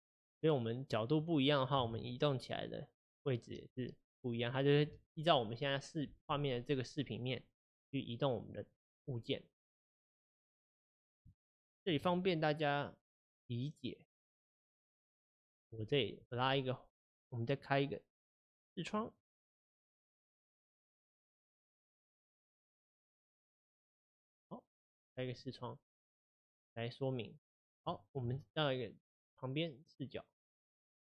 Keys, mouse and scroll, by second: 1.8 g, 3.7-20.1 middle drag, 20.1-27.9 drag, 27.9-31.0 shift+middle drag.